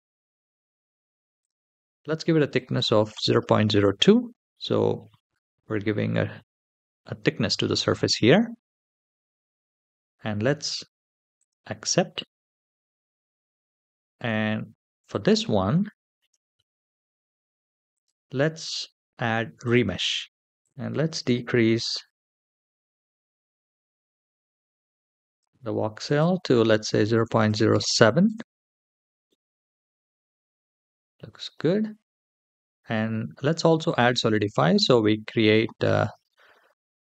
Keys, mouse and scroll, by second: 1.2-3.5 drag, 4.9-6.2 middle drag, 6.6-7.6 scroll up 2, 8.0-8.5 scroll down 1, 8.5 scroll down 3, 9.2-11.1 scroll down 5, 11.1 click, 12.8-14.0 shift+middle drag, 14.9 click, 15.7 shift+middle drag, 17.7 click, 19.5 click, 20.2-21.0 scroll down 3, 20.6-25.2 drag, 25.8-28.0 drag, 29.0-30.7 middle drag, 31.1 shift+middle drag, 33.6 click, 34.2-34.8 scroll down 1, 34.8-36.7 scroll down 3, 36.7 scroll down 1.